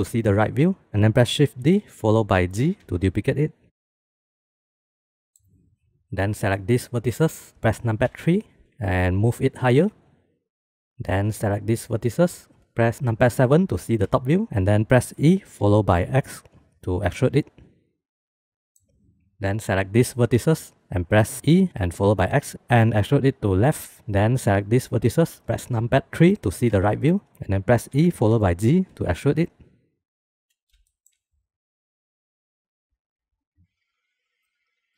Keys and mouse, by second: 0.8 ctrl+z, 0.8 shift+d, 1.6 shift+d, 5.2-5.7 middle drag, 6.7 click, 8.0 KP_3, 8.6 shift+middle click, 9.2 g, 11.9 click, 13.3 KP_7, 15.1 e, 18.6 middle click, 19.4 shift+middle click, 19.4 shift+click, 20.0 click, 21.4 e, 24.6 click, 26.0 KP_3, 27.2 shift+click, 27.9 e, 31.3 e, 33.6 e.